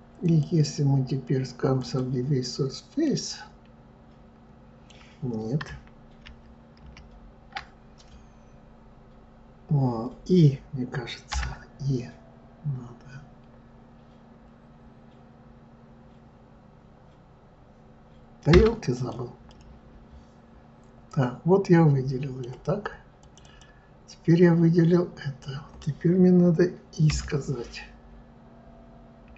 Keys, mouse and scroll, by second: 0.2-3.0 drag, 3.0-6.0 middle drag, 6.2 ctrl+z, 6.8 ctrl+z, 18.9 click, 19.5-22.5 middle drag, 23.2 click, 23.4 click.